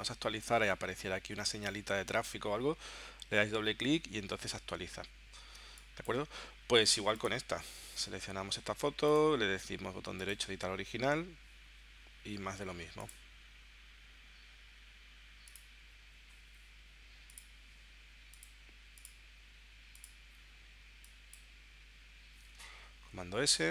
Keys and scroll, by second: 5.6 space, 22.7 super+s.